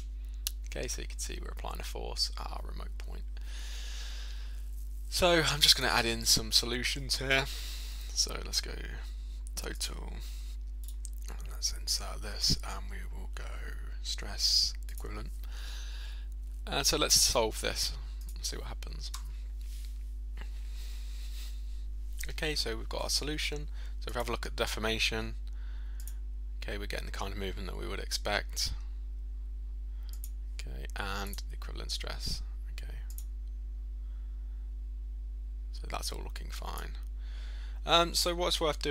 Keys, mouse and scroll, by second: 5.8 click, 6.3 right click, 9.8 click, 10.9 right click, 15.0 click, 17.3 right click, 18.2 click, 24.2 click, 25.2 click, 25.2 click, 26.0 click, 27.1 click, 30.2 click, 31.3 click, 33.2 click, 36.8 click.